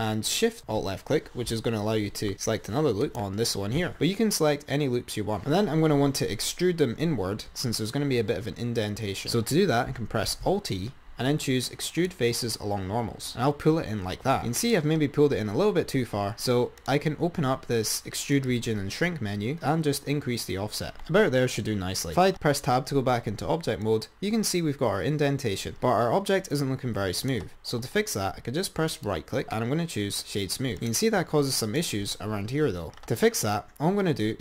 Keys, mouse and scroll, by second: 3.4 ctrl+alt+shift+click, 5.5-8.0 scroll up 5, 10.6 alt+e, 14.3 click, 16.9-22.3 drag, 24.0 click, 29.2-30.6 right drag, 31.0 click, 33.0 scroll up 4.